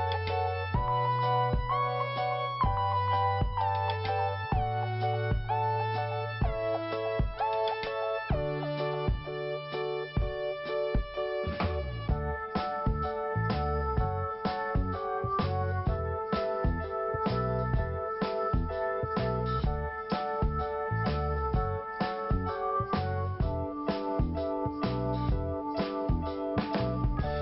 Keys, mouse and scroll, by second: 1.3-1.7 scroll down 1, 2.6 click, 2.7 click, 3.5 click, 6.2 click, 6.3 click, 9.7 click, 9.8 click, 11.2 click, 17.3 click, 17.4 click, 17.5 click, 17.5 click, 18.2 click, 18.3 click, 20.8 click, 22.6 click, 24.1 click, 25.0 click.